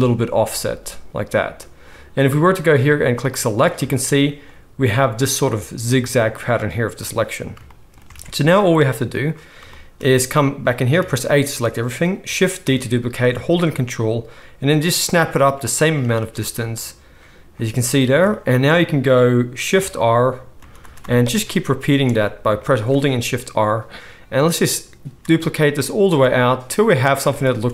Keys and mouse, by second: 3.1-15.8 drag, 8.1 alt+a, 10.9 a, 12.6 shift+d, 15.8-27.7 ctrl+middle drag, 20.5-27.7 typing.